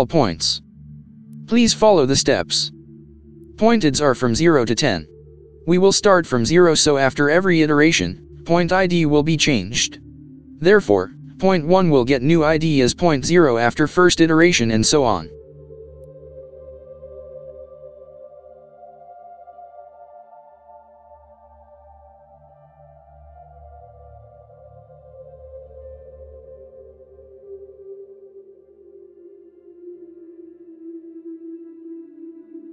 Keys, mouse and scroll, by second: 1.5 typing, 2.8 typing, 3.8 Return, 7.5-8.8 typing, 9.8 x, 12.5 shift+,, 13.0 =, 14.5-15.5 typing, 19.2 ctrl+Return, 20.5 Tab, 21.9-22.3 typing, 24.2-26.0 typing, 26.9 Return, 29.7 shift+9, 31.0-32.1 typing.